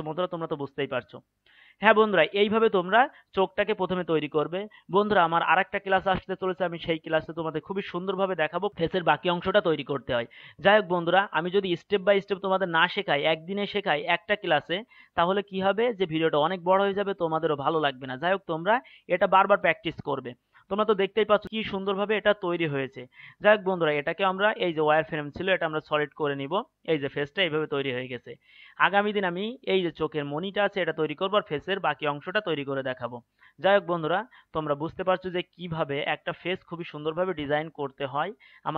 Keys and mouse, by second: 23.7-25.2 drag, 25.4 click.